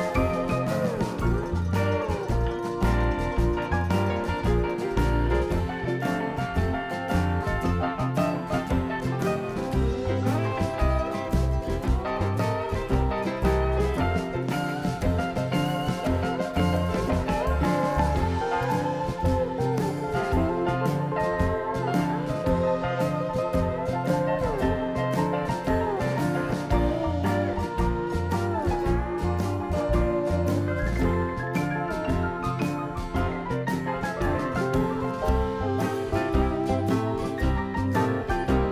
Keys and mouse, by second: 0.7 ctrl+shift+b, 2.9 i, 4.8 click, 5.0 e, 6.2 click, 7.5-8.6 drag, 8.8 click, 9.5 x, 13.7 KP_7, 19.1 Tab, 19.3-20.9 drag, 20.9 Tab, 21.7-25.1 drag, 25.1 shift+a, 26.8 Tab, 28.2 a, 29.7 click, 30.1 shift+a, 34.0 Tab, 34.7 Tab, 35.1 Tab, 37.0 Tab.